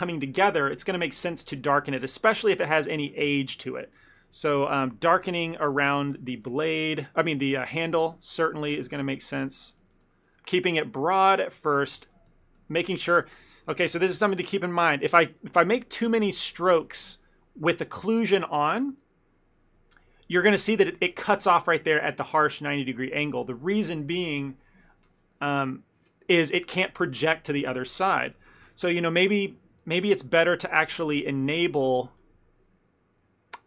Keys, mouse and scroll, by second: 2.5 ctrl+middle click, 2.7 middle click, 2.8 ctrl+middle click, 3.1 f, 3.3 shift+middle click, 3.4 shift+middle click, 3.9 click, 4.2 click, 5.0 click, 5.6 middle click, 6.0 click, 6.2 click, 6.8 middle click, 7.1 click, 7.4 middle click, 7.8 click, 8.3 click, 8.4 click, 8.9 f, 9.2 ctrl+middle click, 9.5 click, 9.7 click, 9.8 click, 9.8 click, 10.0 click, 10.1 click, 10.3 middle click, 10.7 ctrl+middle click, 10.9 click, 11.0 click, 11.2 click, 11.5 middle click, 11.9 middle click, 12.0 ctrl+middle click, 12.2 click, 12.5 click, 12.7 click, 12.8 click, 13.1 middle click, 13.3 ctrl+middle click, 14.4 middle click, 14.6 middle click, 15.0-15.7 ctrl+z, 15.9 ctrl+z, 16.3 ctrl+z, 16.4 ctrl+z, 16.6 ctrl+z, 16.9 middle click, 17.2 ctrl+middle click, 17.4 middle click, 19.1 middle click, 19.2-20.1 ctrl+middle click, 19.8 ctrl+middle click, 20.0 middle click, 20.7 ctrl+middle click, 20.8 ctrl+middle click, 22.3 middle click, 22.4 ctrl+middle click, 22.9 middle click, 22.9 ctrl+middle click, 23.2 ctrl+middle click, 28.5 ctrl+z, 28.6 ctrl+z, 29.4 ctrl+z, 29.7 ctrl+z, 29.9 middle click, 30.2 middle click, 30.3 ctrl+middle click, 30.4 ctrl+middle click, 31.2 ctrl+z, 32.2 click.